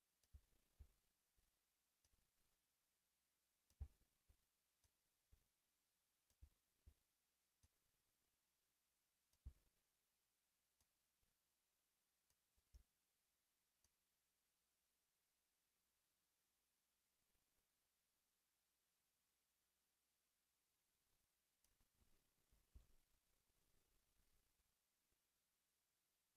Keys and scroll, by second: 22.7 alt+a.